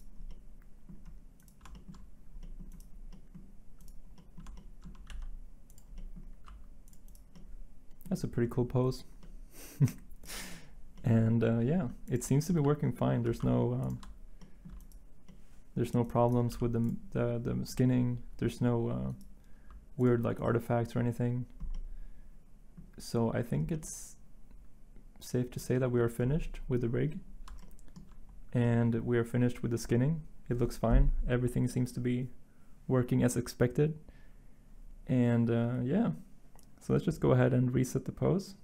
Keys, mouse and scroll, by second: 5.1 g, 6.4 r, 11.8 r, 13.2 r, 13.3 y, 16.5 g, 19.5 r, 25.6-26.2 middle drag.